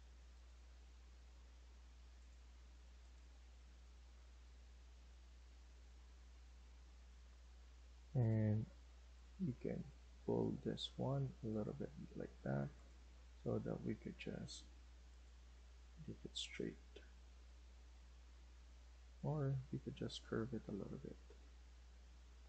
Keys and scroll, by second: 7.2 Escape, 7.5 Escape, 13.9 Escape.